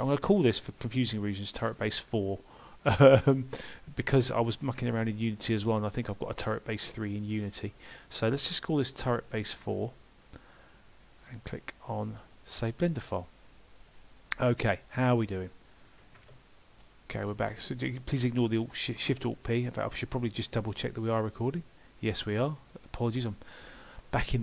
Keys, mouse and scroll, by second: 16.2 alt+shift+p.